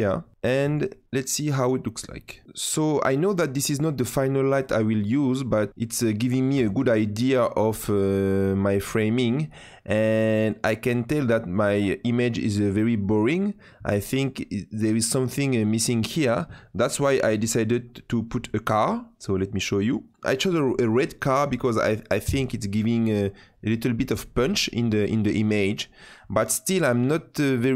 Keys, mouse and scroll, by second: 2.0 click, 17.1-17.4 scroll up 3, 17.4-18.4 scroll down 10, 19.7 click.